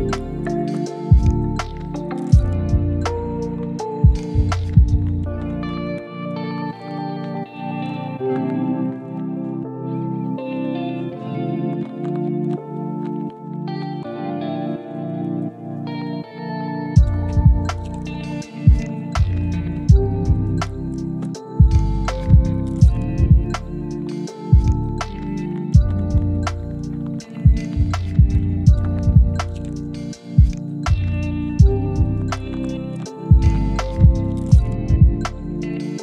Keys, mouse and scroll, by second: 0.5 r, 1.8 e, 2.6 r, 3.1 e, 7.7 s, 8.4 g, 9.5 r, 10.0 g, 10.7 scroll down 1, 11.1 middle click, 11.5 shift+middle click, 11.9-12.7 scroll up 1, 15.7 shift+middle click, 18.1 middle click, 19.7 ctrl+click, 20.1 middle click, 20.8 ctrl+click, 21.3 ctrl+click, 22.9 s, 24.0 scroll down 1, 24.2 middle click, 25.1 scroll up 1, 25.5 scroll down 1, 25.8 shift+middle click, 27.6 middle click, 29.8 shift+click, 30.0 middle click, 30.5 shift+double click, 30.7 shift+click, 30.8 shift+double click, 31.3 double middle click, 32.9 s, 33.8 scroll down 1, 34.0 middle click, 34.4 shift+middle click, 35.5 scroll up 1, 35.7 shift+middle click.